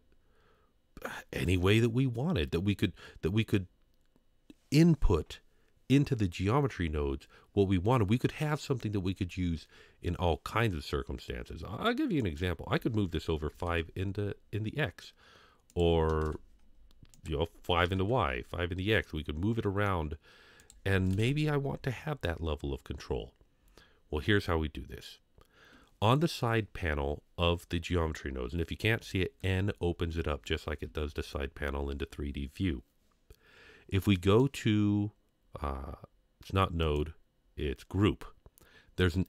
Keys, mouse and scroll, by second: 12.2-13.7 drag, 15.7 click, 17.1 click, 19.0 middle click, 20.6 click, 28.8 n, 29.4 n, 30.9 n, 34.4 click, 36.8 click.